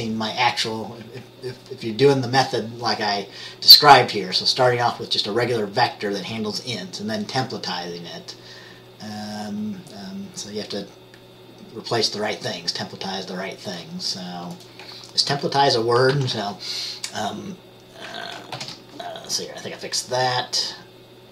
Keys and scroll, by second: 16.3 ctrl+s, 18.8 ctrl+b.